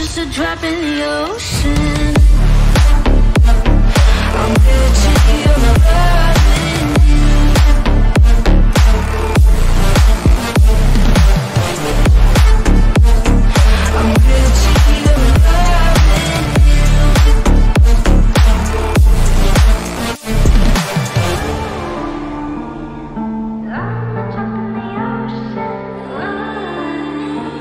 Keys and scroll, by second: 14.7 F3, 15.2 F3, 15.5 Escape, 16.2 F2, 20.2 F5, 20.8 F9.